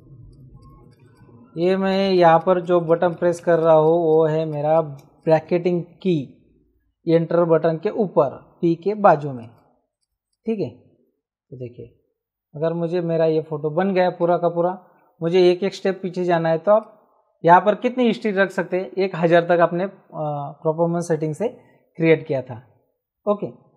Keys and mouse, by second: 5.0 space, 5.2 click, 9.0 space, 9.3 click, 9.9 click, 16.7 click.